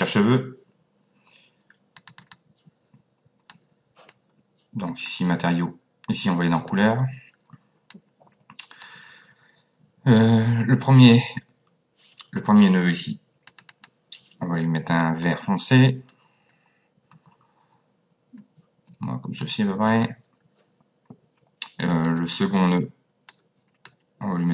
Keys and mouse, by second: 1.9 click, 3.5 click, 6.7 click, 7.9 click, 13.5 click, 15.3 click, 19.9 click, 21.9 click, 23.4 click.